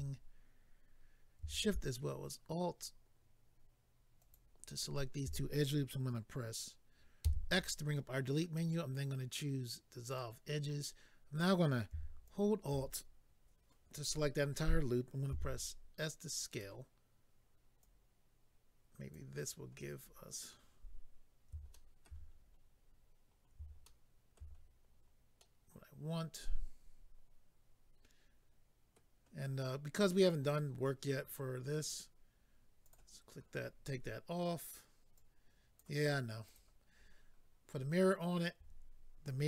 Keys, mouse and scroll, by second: 4.2 alt+click, 10.1 click, 12.2 alt+click, 16.5 click, 16.5 s, 16.6 click, 17.8 click, 19.6-20.4 scroll down 4, 21.7 shift+middle click, 22.3-23.3 scroll down 4, 23.4-23.8 scroll down 2, 23.8 shift+middle click, 25.4 middle click, 32.8 click, 32.9 click, 35.1 click, 36.4 click, 36.5 click.